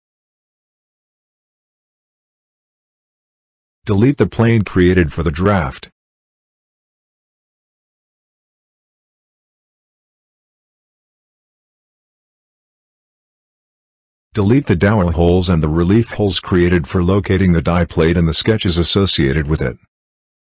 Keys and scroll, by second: 4.9 Delete.